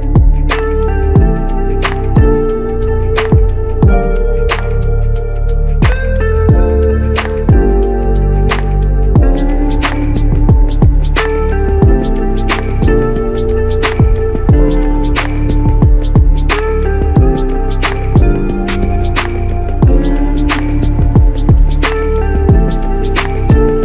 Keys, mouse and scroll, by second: 4.6 alt+click, 7.8 alt+click, 9.5 alt+click, 15.5 alt+click.